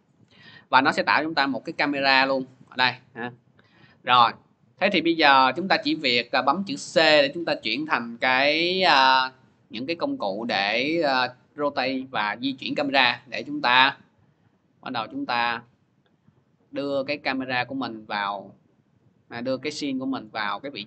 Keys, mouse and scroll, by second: 1.1 click, 1.6 click, 5.8 scroll, 6.5-7.1 typing, 8.4-10.9 middle drag, 8.4 c, 20.0-20.8 drag.